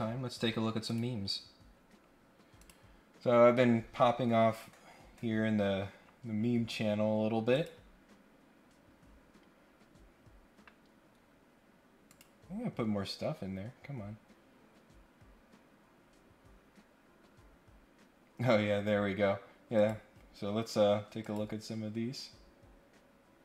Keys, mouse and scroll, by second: 0.8 click, 1.8 scroll down 2, 2.6 click, 4.2-4.5 scroll down 2, 4.9 scroll up 1, 5.6 scroll up 1, 5.9-6.8 scroll down 3, 7.5 click, 7.8 scroll up 1, 8.6-9.2 scroll up 2, 9.6 scroll down 1, 9.8-10.2 scroll up 3, 10.5 scroll down 2, 12.1 click, 15.8-16.7 scroll down 2, 17.4 scroll up 1, 18.2-18.6 scroll down 3, 18.9-19.4 scroll up 2, 19.7 click, 21.2 click.